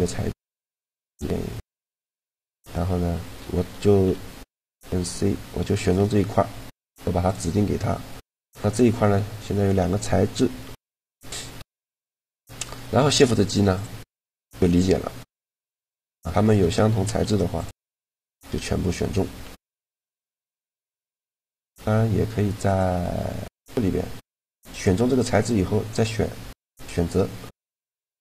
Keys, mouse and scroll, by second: 3.9 a, 4.4 c, 5.7 click, 6.0-8.2 right drag, 6.9-8.2 drag, 8.2 Tab, 10.8 Tab, 11.4 a, 11.9 middle click, 12.7 shift+g, 14.5 g, 16.2 click, 16.7 shift+g, 19.1 g, 21.7 a, 23.1 right click, 23.6 a, 25.1 click, 26.5-28.0 drag, 27.5-28.2 middle drag, 27.5 right click.